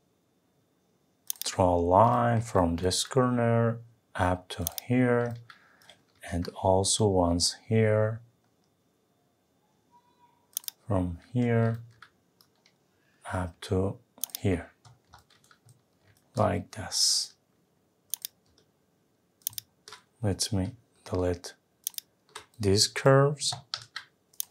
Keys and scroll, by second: 6.1 Escape, 23.8 Delete.